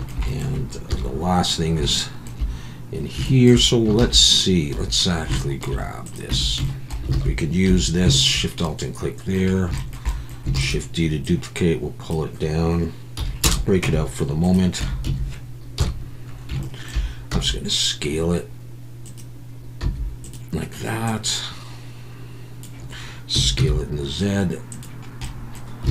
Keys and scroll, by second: 0.9 KP_1, 4.0 shift+a, 6.3 Tab, 7.1 alt+a, 7.7 3, 8.3 Tab, 10.6 shift+d, 13.2 p, 13.8 Tab, 14.8 Tab, 15.1 a, 15.8 KP_1, 17.3 s, 19.8 s, 23.3 s, 23.6 z.